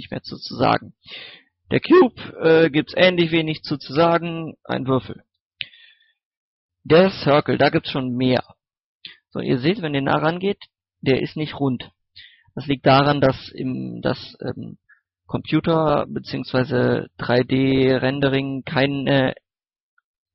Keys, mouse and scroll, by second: 1.2 click, 2.1-4.4 middle drag, 5.0 x, 5.5 click, 5.7 shift+a, 6.9 click, 7.3 scroll up 1, 8.1 middle click, 9.1 scroll up 1, 9.5 shift+middle click, 9.9-10.8 scroll up 1, 11.9 scroll down 1, 12.3 shift+middle click, 16.9-17.2 scroll down 1, 17.2 middle click, 17.6 scroll up 1, 18.6-20.3 middle drag.